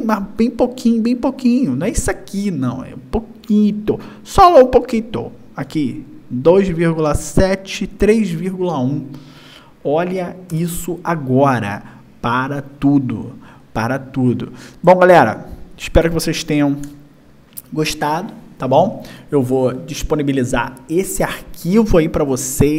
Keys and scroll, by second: 9.9 y, 16.2 y.